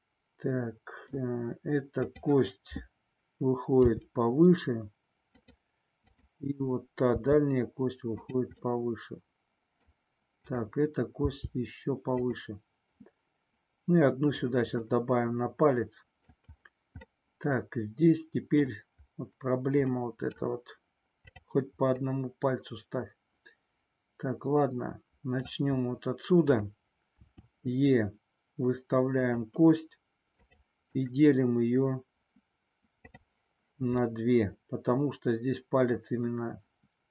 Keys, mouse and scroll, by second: 2.0 click, 3.9 g, 5.4 click, 6.0 click, 7.2 g, 8.2 click, 8.7 scroll up 1, 8.7-9.9 middle drag, 10.5 click, 11.1 g, 12.2 click, 15.1-16.4 middle drag, 17.1-18.6 middle drag, 18.6 scroll down 1, 19.9 middle click, 20.4-21.1 scroll down 1, 21.1 click, 22.0-25.4 middle drag, 27.2 e, 29.2 click, 30.4 click, 34.0-36.0 middle drag.